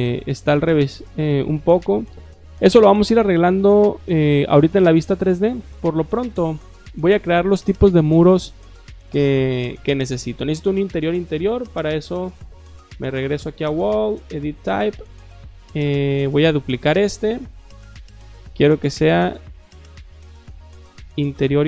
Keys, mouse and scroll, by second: 0.0 shift+click, 1.2 shift+click, 1.7 shift+click, 4.2 shift+middle click, 4.7 middle click, 5.1 shift+middle click, 6.5 click, 12.9 click, 13.3 click, 14.2 click, 16.6 click, 18.0 click, 19.2 click, 20.8-21.6 typing.